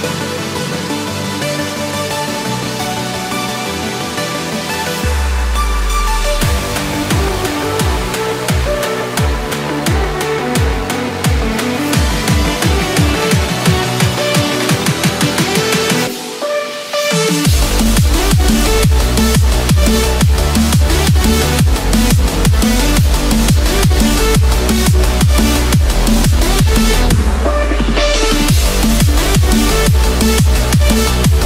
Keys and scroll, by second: 14.2 ctrl+=.